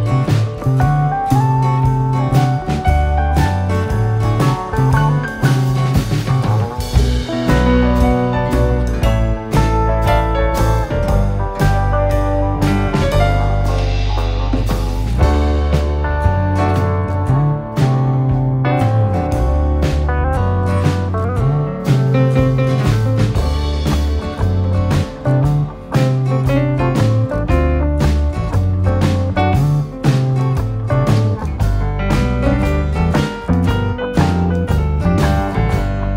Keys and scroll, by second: 0.2 9, 12.5 Escape, 13.3 d, 15.1 5, 15.5 6, 16.8 Return, 18.0 Escape, 22.7 Escape, 27.3 d, 31.4 3, 31.8 9, 32.3 Return, 33.9 Escape.